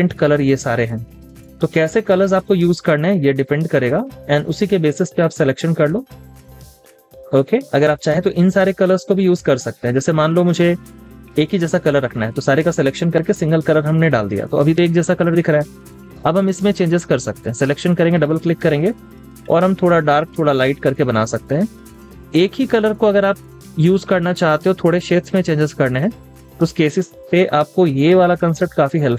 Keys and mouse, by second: 18.9 double click, 27.3 double click.